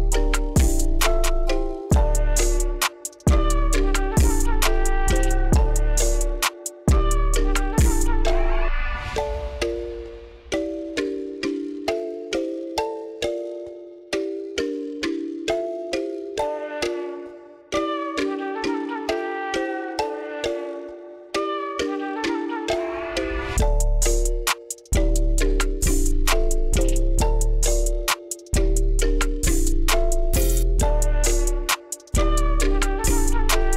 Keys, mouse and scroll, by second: 4.4 click, 5.4 click, 7.2 click, 8.5 click, 10.7 click, 11.9 click, 12.8-13.9 drag, 14.7 click, 20.5 click, 21.4 KP_8, 21.6 Return, 22.8 click, 24.7 click, 32.1-33.2 drag.